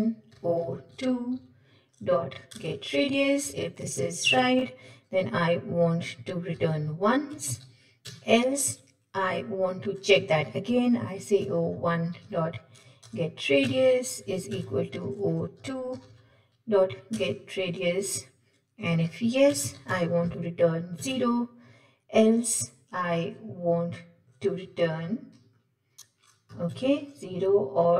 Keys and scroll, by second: 2.6 Return, 13.1 Return.